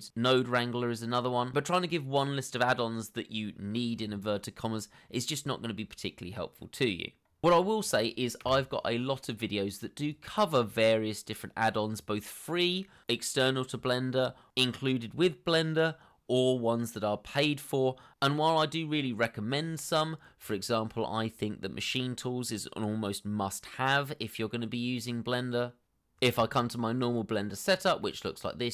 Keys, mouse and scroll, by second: 10.7 BackSpace, 26.4 n.